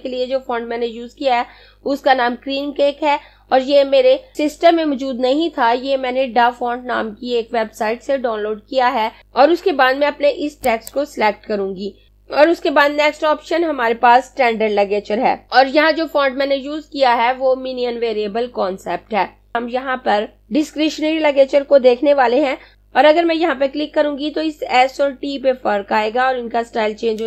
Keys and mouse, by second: 10.7 click.